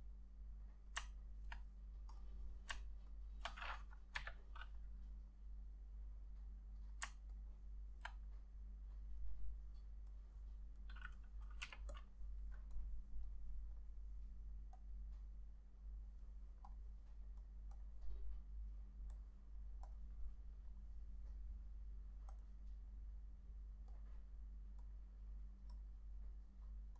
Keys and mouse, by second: 3.2 ctrl+click, 4.3 Delete, 7.5 ctrl+click, 11.8 k, 17.9 double click.